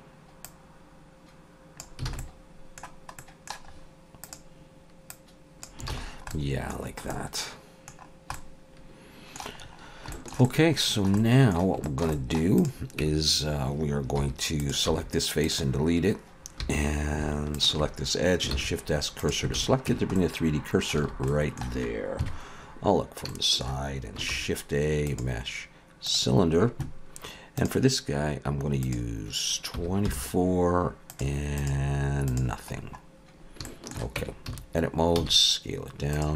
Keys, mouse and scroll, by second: 0.4 click, 2.1 alt+a, 2.2 middle click, 3.2 middle click, 3.7-4.2 scroll up 2, 4.2 click, 5.1 click, 5.9 alt+a, 6.0 scroll down 4, 6.3 middle click, 6.8 scroll down 1, 7.1 middle click, 8.3 middle click, 9.6-9.9 scroll up 3, 10.1 shift+middle click, 10.4 middle click, 11.2 middle click, 11.8 shift+middle click, 12.1 middle click, 12.6 click, 13.0 Tab, 14.2 3, 14.6 click, 14.9 x, 16.6 2, 17.5 alt+shift+click, 18.5 shift+s, 19.6 alt+a, 19.9 Tab, 20.2 middle click, 21.0 alt+a, 21.3 middle click, 22.2 KP_3, 23.0 scroll up 2, 23.3 shift+middle click, 24.3 shift+a, 27.7 click, 28.9 click, 32.4 click, 32.8-33.6 scroll down 1, 33.6 scroll down 3, 33.6 shift+middle click, 34.2 Tab, 34.5 a, 35.1 s.